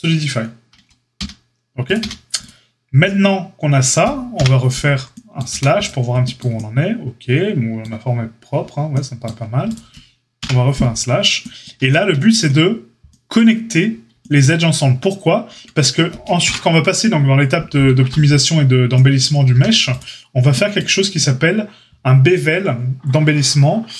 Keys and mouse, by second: 0.7 Tab, 1.1 q, 1.9 q, 4.3 KP_Divide, 5.4 a, 10.4 KP_Divide, 11.7 Tab, 15.5 Tab, 16.4 KP_Divide, 19.4 a.